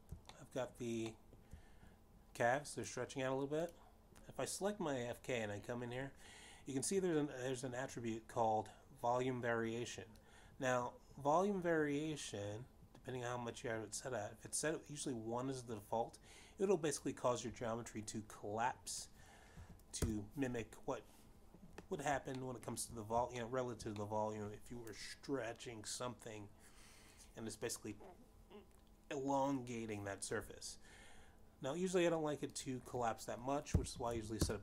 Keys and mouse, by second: 1.5 click, 1.9 shift+middle click, 3.0 shift+middle click, 3.7 shift+middle click, 6.3 click, 12.9 click, 21.7 click, 22.2 1, 22.5 Return, 25.2 shift+middle click, 26.0 shift+middle click, 26.7 middle click.